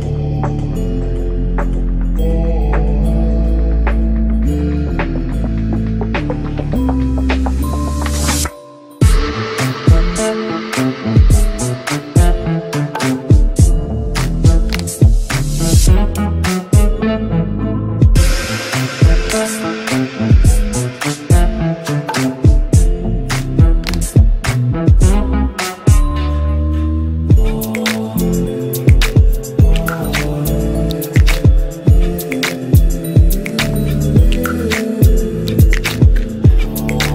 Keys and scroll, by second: 20.2 ctrl+g, 23.9 c, 24.1 e, 24.4 Escape, 36.6 F3.